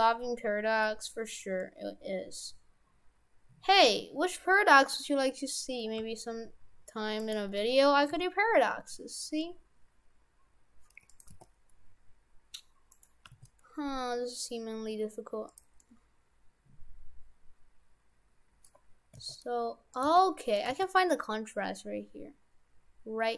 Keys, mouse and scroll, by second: 1.6 middle click, 5.0 middle click, 6.0 g, 8.1 s, 11.4 g, 13.3 g, 15.8 middle click, 19.2 s, 20.1 g, 20.7 g.